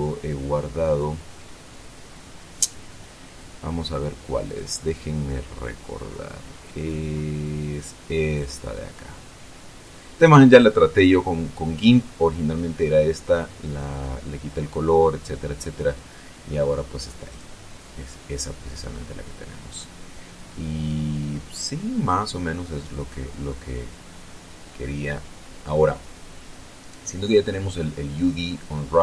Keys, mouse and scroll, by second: 0.1 click, 5.0 click, 5.9-7.9 scroll down 5, 8.8 click, 11.1-11.9 scroll up 2, 17.8 click, 19.3-19.8 scroll up 1, 20.1-21.2 scroll down 1.